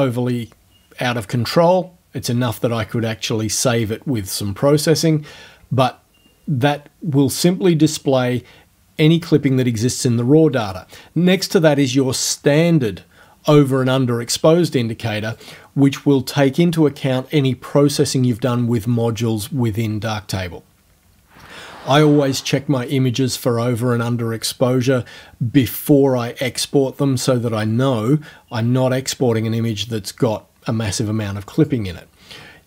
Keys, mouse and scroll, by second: 10.6 click, 15.4 click, 31.6 click.